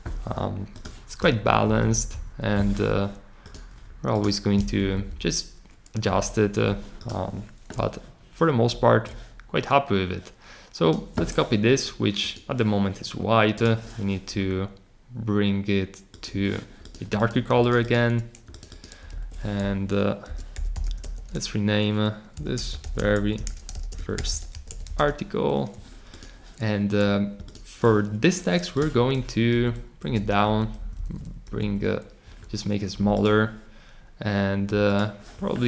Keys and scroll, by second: 1.3 Up, 1.6 Up, 1.8 Up, 2.1 Up, 4.7 Down, 4.9 Down, 5.0 Down, 6.0 Up, 19.1 super+a, 20.0-25.4 typing, 29.5 shift+Down, 30.0 shift+Down, 30.8 Up, 31.5 Down, 32.9-33.6 typing.